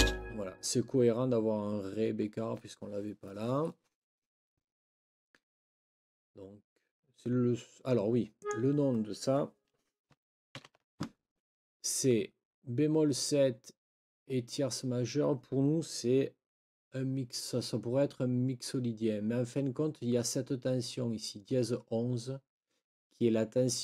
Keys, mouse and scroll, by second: 0.0 space, 8.3 click, 10.5 ctrl+t.